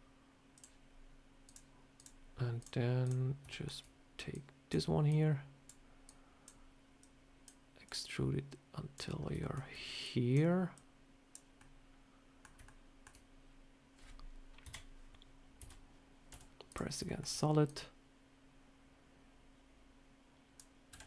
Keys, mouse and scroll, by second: 1.3 click, 1.8 click, 2.5 click, 2.9 click, 3.4 shift+middle click, 4.2 click, 5.0 click, 5.9 click, 6.9 click, 7.7 click, 9.1 scroll down 1, 9.3 shift+middle click, 9.9 click, 10.6 click, 11.5 middle click, 12.5 middle click, 14.5 KP_3, 15.5 a, 16.2 z, 16.9 shift+middle click, 17.6 click, 20.8 e.